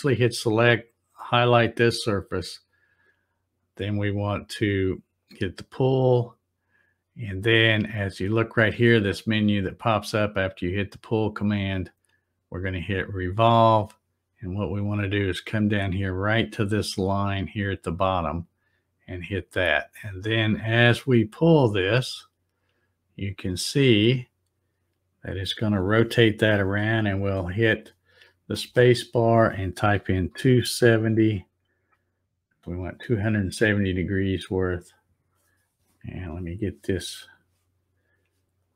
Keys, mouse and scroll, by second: 0.9 click, 5.2 click, 13.2 click, 18.1 click, 21.6-28.7 drag, 28.6 space, 34.2 scroll up 1, 34.8 scroll up 4, 36.1 z, 38.5 click.